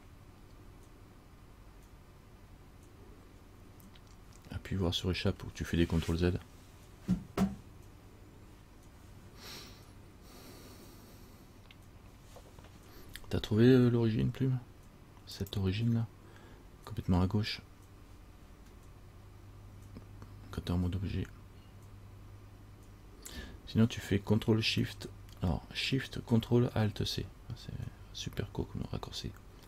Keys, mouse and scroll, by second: 15.5 click.